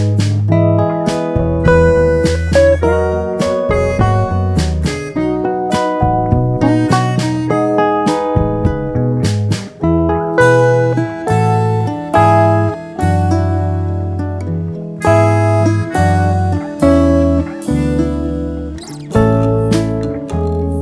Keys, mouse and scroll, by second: 0.4 click, 3.1 click, 4.8-5.1 drag, 5.5-7.3 drag, 8.1 click, 8.7 click, 9.6 click.